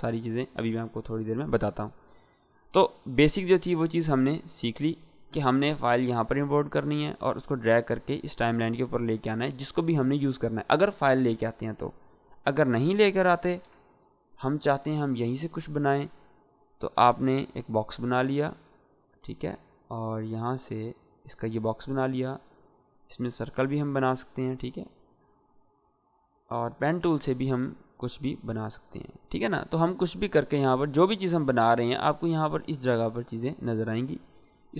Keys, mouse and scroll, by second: 8.2-9.1 drag, 12.1-12.7 click, 13.4 Delete, 14.3-23.8 drag, 16.3-17.2 drag, 22.8-23.7 drag, 24.2-25.1 shift+click.